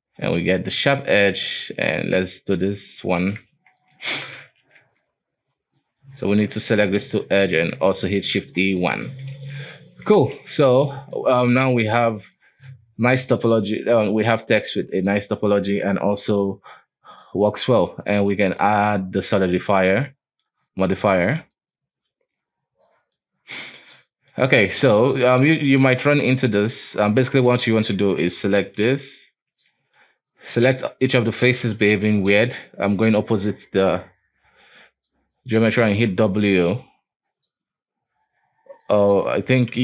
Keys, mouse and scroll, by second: 1.0 Tab, 1.6 right click, 2.1 shift+right click, 2.7 shift+right click, 3.3 shift+e, 4.1 Tab, 4.5 scroll down 1, 4.6 alt+a, 4.9 Tab, 5.6-6.5 scroll up 3, 6.5 right click, 6.9 shift+middle click, 7.5 shift+right click, 8.2 shift+e, 9.0 Tab, 9.2-10.5 scroll down 8, 9.5 alt+a, 10.5 alt+w, 11.0-11.4 middle drag, 11.4-12.0 scroll down 2, 12.0 n, 12.3 middle click, 12.6 alt+w, 13.0-13.3 scroll up 1, 13.3-15.3 middle drag, 15.3-16.2 scroll up 2, 16.2-16.6 scroll down 4, 16.6 middle drag, 16.9-17.3 scroll up 3, 17.3-18.6 middle drag, 18.6-20.1 drag, 20.1-21.6 middle drag, 21.6-23.9 drag, 23.9-24.7 middle drag, 24.7 scroll down 4, 25.0-25.3 middle drag, 25.3 right click, 25.6 ctrl+a, 26.4 middle drag, 26.6 scroll down 1, 26.7-27.2 scroll up 2, 27.2 Tab, 27.6 scroll up 2, 27.8 alt+a, 28.7 l, 29.6 l, 30.1-31.3 middle drag, 31.3 right click, 32.0 l, 32.4-35.5 middle drag, 36.0 w.